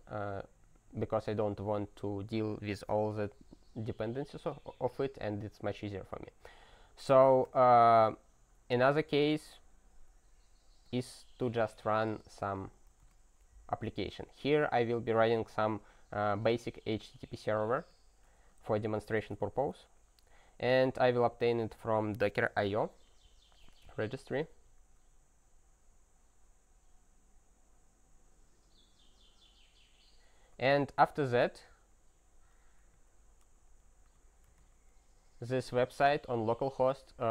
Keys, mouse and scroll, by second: 7.3-8.6 scroll, 10.8 click, 10.9 click, 12.0 ctrl+space, 12.1 ctrl+e, 12.4 ctrl+b, 13.0 alt+w, 17.8 Return, 18.6 ctrl+y, 19.4 Return, 21.5 Return, 31.1 alt+w.